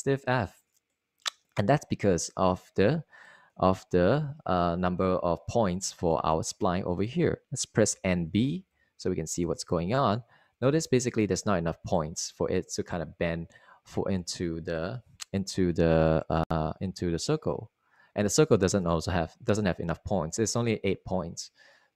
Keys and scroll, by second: 8.9-9.8 typing.